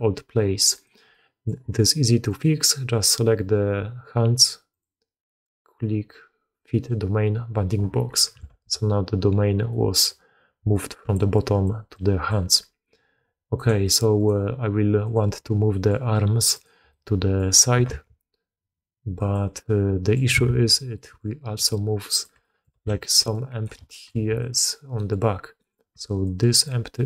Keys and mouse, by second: 0.7 click, 1.0-1.4 drag, 2.5-6.9 drag, 8.0 middle drag, 8.4 alt+a, 9.6 drag, 10.5 d, 10.6 click, 11.1 d, 11.2 click, 11.2-12.4 d, 11.8 click, 12.4-13.5 drag, 13.5 d, 13.8 click, 14.1 click, 15.2-15.8 drag, 16.5 click, 16.8-17.3 drag, 17.7 r, 19.6-20.1 drag, 20.7 ctrl+z, 20.9 click, 21.5 d, 21.6 click, 22.2 d, 22.3 drag, 22.7 alt+a, 23.1 d, 23.2 click, 23.8 shift+drag, 24.3 drag, 24.9 click, 25.5 click, 25.8-27.0 typing, 26.1 click, 26.8 click.